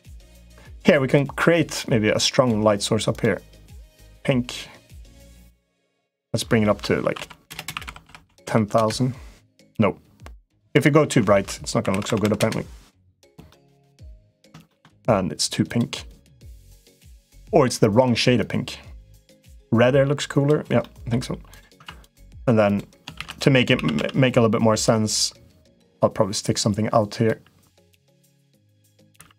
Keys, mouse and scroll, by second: 1.5 click, 2.9 click, 5.7-9.4 drag, 7.4 BackSpace, 7.8 u, 8.2 u, 10.3-12.8 drag, 11.8 0, 12.0 0, 13.2 middle click, 14.5 shift+middle click, 16.2 click, 17.0 click, 20.7 middle click, 21.6 Tab, 21.9 click, 22.4 click, 22.9 shift+d, 23.5 s, 25.6 middle click, 26.2 click, 28.4 click, 29.0 e.